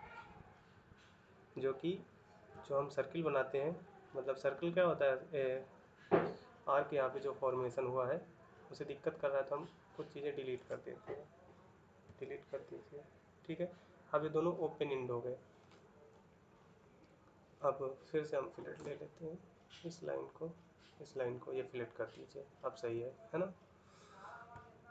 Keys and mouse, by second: 11.8 Delete, 24.4 ctrl+middle click.